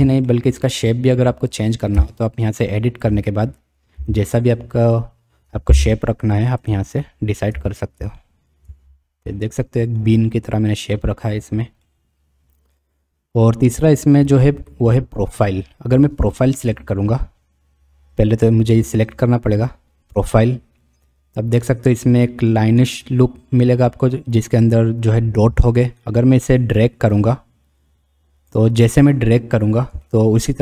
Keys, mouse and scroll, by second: 0.3-0.7 shift+drag, 2.0 Tab, 2.7 click, 4.0 g, 7.5 Tab, 8.2 shift+click, 11.8-12.7 drag, 16.2 click, 18.8 click, 20.2 click, 27.1-28.5 drag, 30.1-30.6 shift+middle drag.